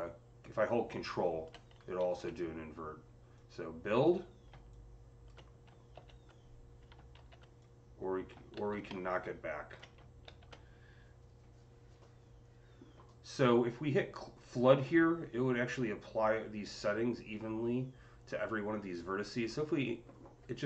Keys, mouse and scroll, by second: 1.9 ctrl+z, 4.6-7.4 drag, 5.8 ctrl+z, 7.0 ctrl+z, 7.4-12.9 drag, 8.4 ctrl+z, 10.1 ctrl+z, 19.2-20.6 drag.